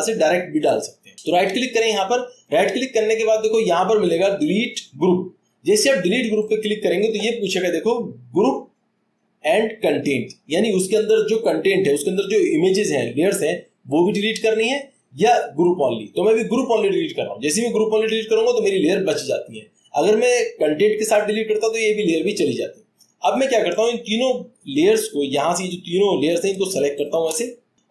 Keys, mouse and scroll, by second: 2.7 click, 18.3 click.